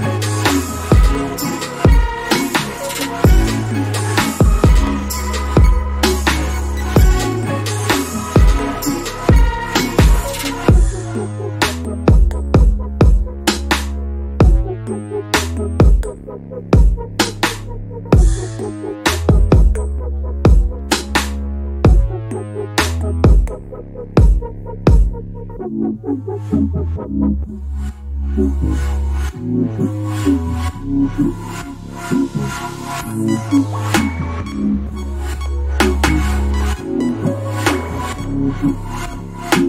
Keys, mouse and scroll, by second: 0.3 click, 1.8 scroll down 1, 2.4 click, 2.7 scroll down 1, 3.0 alt+middle click, 3.4 alt+click, 3.8 double click, 4.5 middle click, 5.3 alt+click, 6.4 alt+middle click, 6.7 alt+click, 8.1 alt+middle click, 8.4 alt+click, 9.4 alt+middle click, 9.8 alt+click, 10.2 alt+middle click, 15.4 click, 17.2 scroll down 1, 17.4 alt+click, 18.2 alt+middle click, 18.5-19.3 scroll up 1, 20.8 click, 25.6 alt+middle click, 26.0 alt+click, 28.1 alt+middle click, 28.6 right click, 29.8 click, 30.0 double click, 35.5 click, 35.8 double click, 36.1 scroll down 1, 36.4 alt+click, 36.9 alt+middle click, 37.2 alt+click, 37.8 alt+middle click.